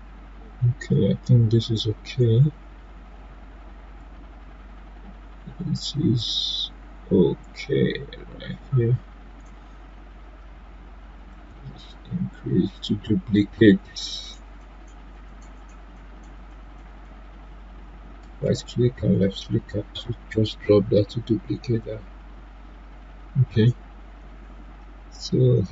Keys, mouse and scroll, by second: 2.1 click, 2.2-6.1 drag, 6.1-10.1 drag, 11.3-18.2 drag, 18.2 shift+right click, 25.6 shift+Num_Lock, 25.6 shift+right click.